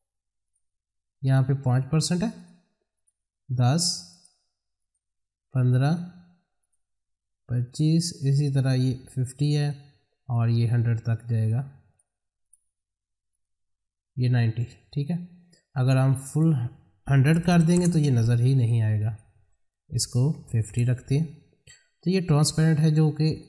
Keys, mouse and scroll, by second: 11.9 click, 19.0 click, 23.3-23.4 drag.